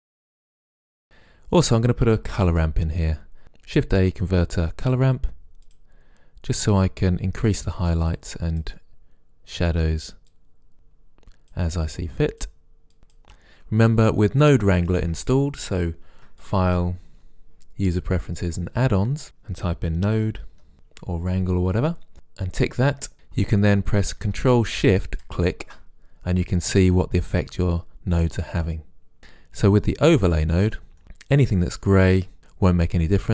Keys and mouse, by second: 1.0-1.7 middle drag, 1.7 click, 2.5 shift+a, 5.8-10.1 drag, 10.4-10.7 drag, 10.8-14.3 drag, 16.5-19.2 drag, 25.3-27.0 drag, 27.2-28.8 middle drag, 28.8-29.2 drag, 30.2-31.9 middle drag.